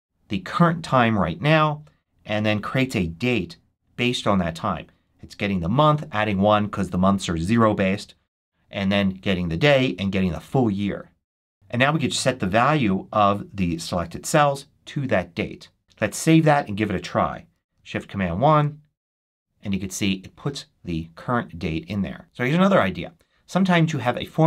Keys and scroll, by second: 11.5 super+c, 14.2 super+v, 15.8 super+s, 18.4 shift+super+1.